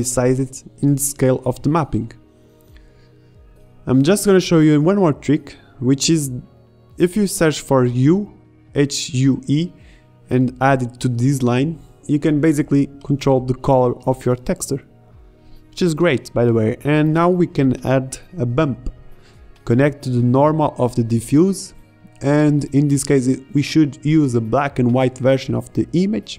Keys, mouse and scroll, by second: 1.9 Tab, 3.9 a, 3.9 b, 4.6 g, 5.8 shift+a, 12.1-16.4 drag, 16.8 click, 17.2 shift+a, 22.6-23.8 drag, 24.5 middle click.